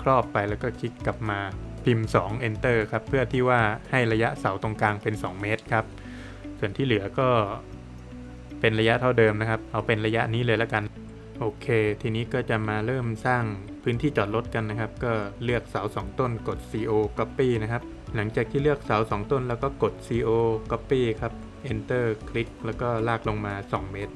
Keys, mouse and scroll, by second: 0.1 Return, 1.2 middle click, 5.9 middle click, 6.7 click, 7.6 click, 11.0 middle click, 11.9 Escape, 12.2 middle click, 12.8 click, 13.5 p, 15.8 space, 16.3 Escape, 16.9 click, 19.4 space, 19.8 click, 21.4 Return, 22.0 Escape, 22.4 click, 23.9 space.